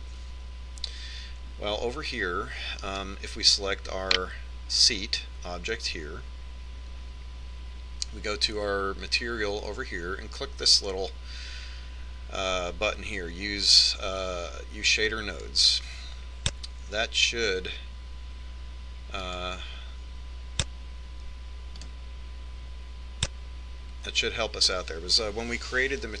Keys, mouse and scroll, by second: 4.0 right click, 16.4-18.1 drag, 20.5-22.3 drag.